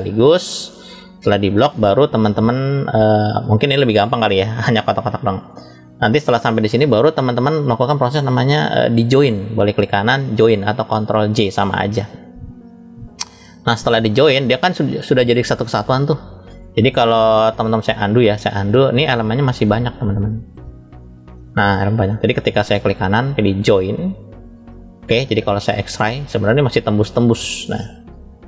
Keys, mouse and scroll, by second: 3.3-6.7 middle drag, 8.9-14.9 right drag, 14.9-18.0 drag, 20.1-21.8 drag, 22.7-25.6 right drag, 25.6 click, 26.8-27.4 middle drag, 27.9-28.4 scroll up 1.